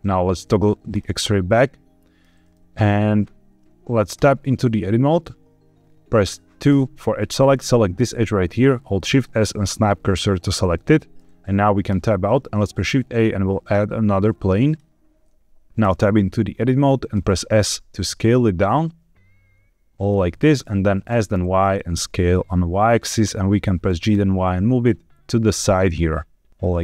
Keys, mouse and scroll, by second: 0.8 click, 1.5 middle click, 2.2 scroll down 1, 2.4 shift+middle click, 4.1 Tab, 6.6 2, 7.4 click, 8.9 shift+s, 10.7 middle click, 11.8 Tab, 12.6 shift+a, 17.1 Tab, 17.1 s, 19.9 click, 20.2 middle click, 21.0 s, 21.3 y, 23.0 click, 23.8 g, 24.0 y, 26.5 click.